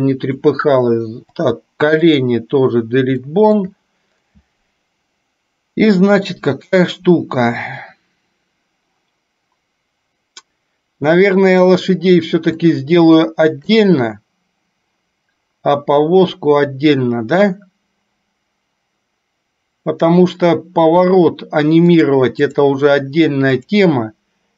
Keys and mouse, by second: 0.1 click, 1.4 Delete, 3.4 shift+middle click, 12.8-13.9 shift+middle drag, 22.1-22.8 drag.